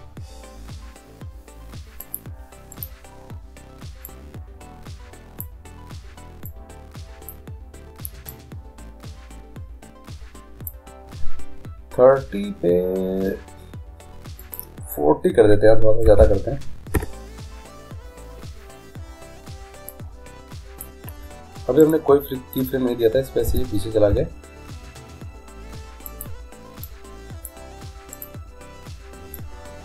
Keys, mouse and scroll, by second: 2.9-4.8 right drag, 4.3-6.1 drag, 6.7-8.4 drag, 8.5-10.3 drag, 14.6-16.4 drag, 20.1-21.8 drag, 22.0-23.7 right drag, 23.7 g, 27.0-28.7 drag, 28.3 right click.